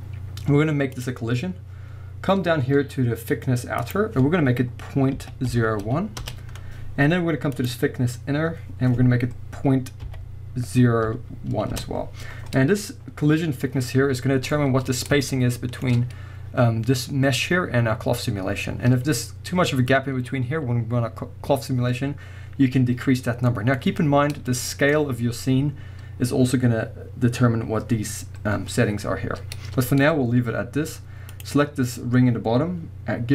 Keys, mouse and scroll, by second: 1.0-14.5 drag, 6.3 Return, 11.8 Return, 14.1 scroll up 2, 14.2-19.2 middle drag, 14.9-15.3 scroll up 1, 15.4 right drag, 19.6-19.9 scroll up 1, 19.9-31.3 middle drag, 23.1-23.5 scroll down 1, 23.8-24.5 scroll up 1, 29.1-29.5 scroll down 1, 29.5-31.3 scroll up 1, 31.3-32.4 drag.